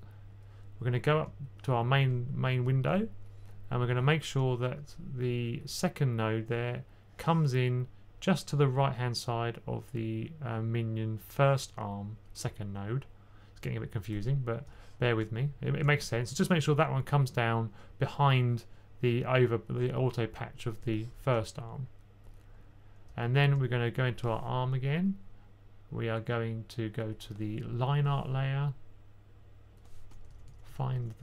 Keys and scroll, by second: 30.3-31.2 typing.